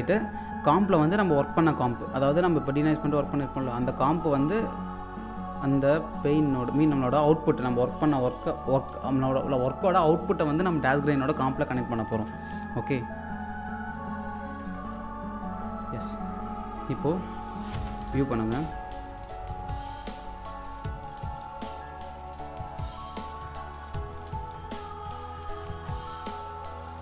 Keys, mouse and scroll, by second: 6.0-12.1 drag, 12.1 space, 12.6-12.9 scroll down 1, 13.0 alt+click, 14.8 ctrl+right click, 16.6 click, 17.7 1, 19.8-20.1 scroll up 1, 21.2-22.0 scroll down 1, 22.9 click, 23.4-26.4 typing, 24.1 click, 26.4 click, 26.7 scroll down 1.